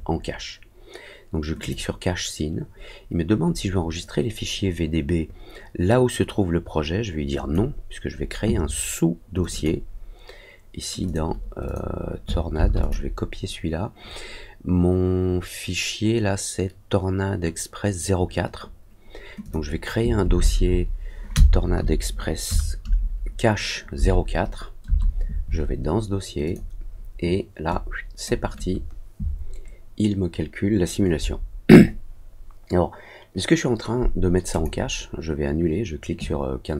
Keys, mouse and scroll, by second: 1.5 click, 7.3 click, 9.3 click, 9.5 click, 11.0 click, 11.6 click, 12.7 click, 19.4 click, 26.4 click, 27.6 click, 34.4 click.